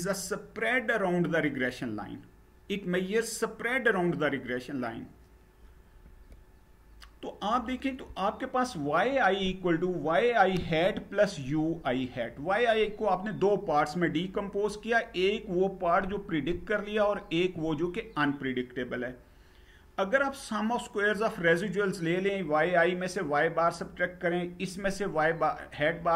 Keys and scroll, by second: 5.7 Page_Down.